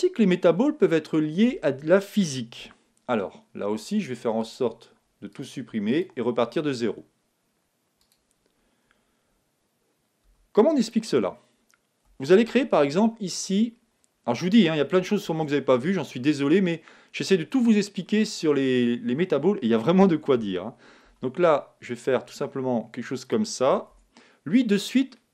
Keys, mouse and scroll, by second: 4.4-6.0 drag, 10.3 x, 12.4 shift+a, 15.2 shift+a, 17.6-20.0 middle drag, 20.3 Tab, 21.0 s, 23.3-25.0 drag, 23.9 Tab, 24.2-25.3 middle drag.